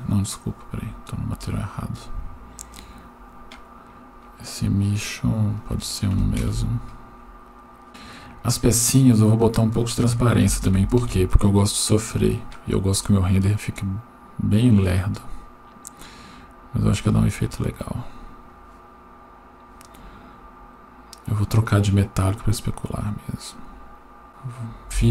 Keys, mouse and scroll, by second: 1.1-2.7 scroll up 8, 2.7 click, 2.7 scroll up 1, 3.3-4.0 scroll down 5, 5.1-5.6 scroll down 1, 5.6 click, 7.9 right click, 9.4-11.1 drag, 13.9-15.3 scroll up 1, 15.3-17.0 scroll down 1, 17.1-18.6 drag, 20.0-20.6 scroll up 4, 21.7 click, 22.7-24.3 drag.